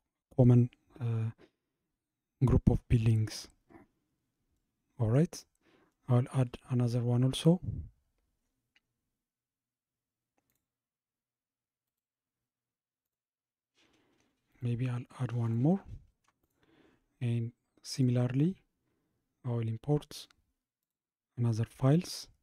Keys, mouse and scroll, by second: 3.4-4.6 scroll down 2, 4.6-5.4 middle drag, 5.4-5.9 scroll down 3, 5.9-6.8 middle drag, 6.8-10.5 scroll up 39, 10.5 click, 11.9-16.4 right drag, 16.4 click, 18.0-21.0 drag.